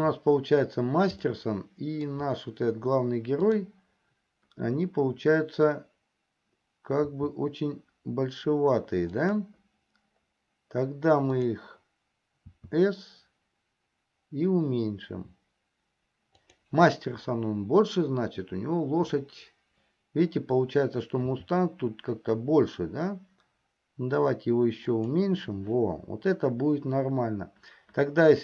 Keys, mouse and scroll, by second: 1.7-2.8 shift+middle drag, 7.3 s, 11.8 click, 13.0 s, 21.4 s.